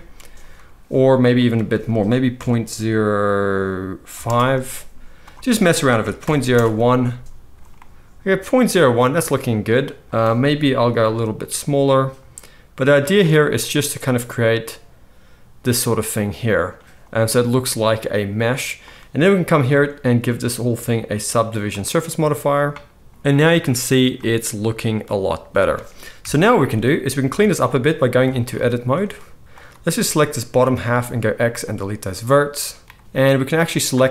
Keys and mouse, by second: 19.8-20.2 middle drag, 20.2-34.1 drag, 26.2 KP_1, 27.7 Tab, 28.5 z, 30.9 x.